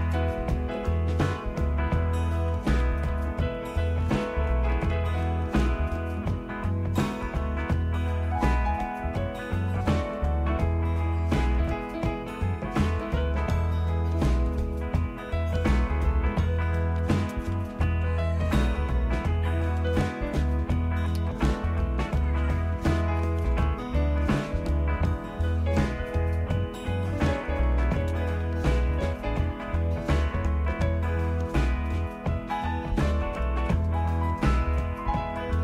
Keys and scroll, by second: 3.1 typing, 3.6 Tab, 4.1 Return, 4.2-5.0 typing, 17.0 typing, 18.0 Tab, 18.0 typing, 19.6 Return, 25.4 typing, 27.2-29.6 typing, 33.5 typing.